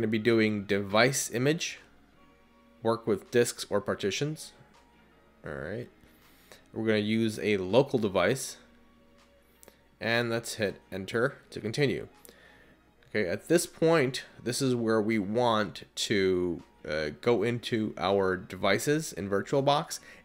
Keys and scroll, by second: 6.7 Return, 10.4 Return, 14.6 Return.